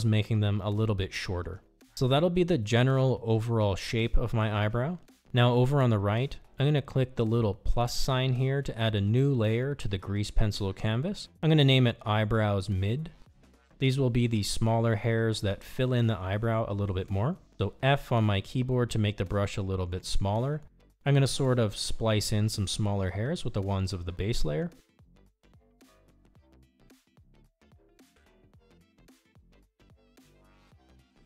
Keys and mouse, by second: 0.7 click, 1.6 click, 12.2 click, 13.5 click, 13.6 click, 19.9 f, 22.3 click, 23.6 click, 24.6 click, 25.6 click, 26.7 click, 27.7 click, 28.8 click, 29.6 click, 30.6 click, 30.9 click.